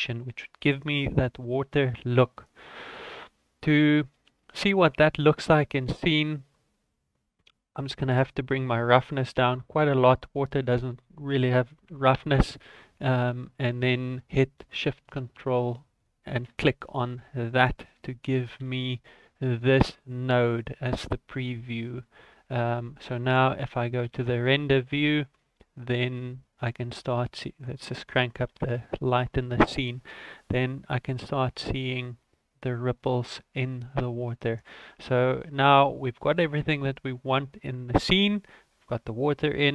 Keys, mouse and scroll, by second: 3.0 scroll down 4, 3.3 middle click, 3.8 middle click, 4.5 middle click, 4.5-5.2 scroll up 5, 5.3 middle click, 7.3 click, 10.7 click, 13.4-13.7 scroll down 1, 16.0 ctrl+shift+click, 20.5 ctrl+s, 20.9-21.8 scroll down 10, 21.9 middle click, 24.0 z, 26.6 click, 27.5 click.